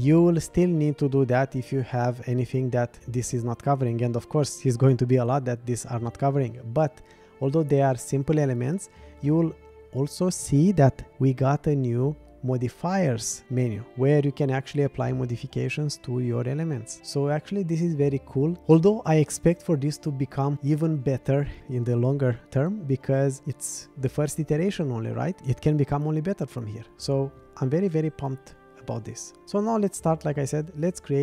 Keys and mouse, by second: 30.8 click.